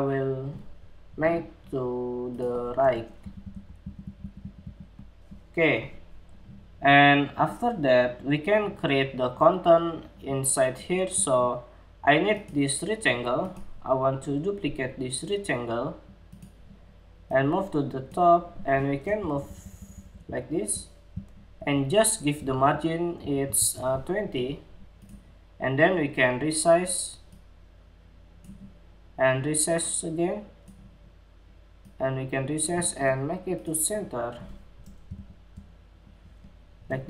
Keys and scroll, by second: 21.9 alt+Down, 22.1 alt+Down, 22.7 alt+Up, 23.1 alt+shift+Down.